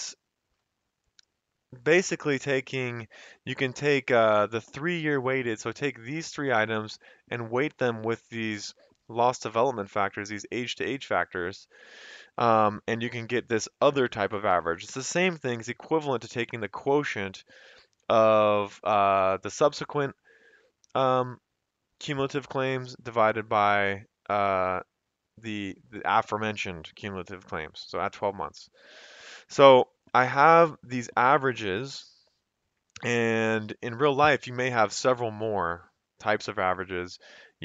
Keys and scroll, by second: 0.6 F2, 1.4 Escape, 3.0 F2, 12.8 Escape, 14.6 F2, 27.9 Escape.